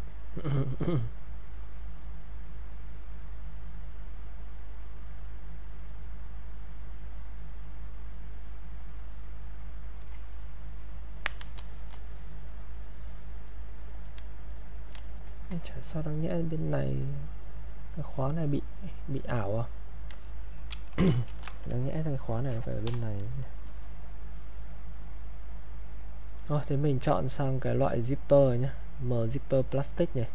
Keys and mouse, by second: 0.6-12.0 drag, 12.2-17.8 drag, 21.0 click, 21.3 ctrl+shift+1, 21.7-25.2 drag, 26.3 click.